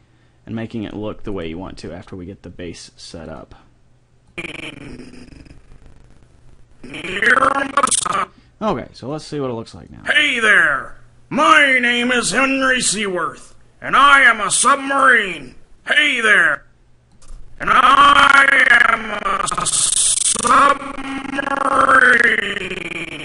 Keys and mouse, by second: 1.3 right click, 1.7 g, 4.3-6.1 drag, 9.1-11.5 drag, 16.3-18.9 drag.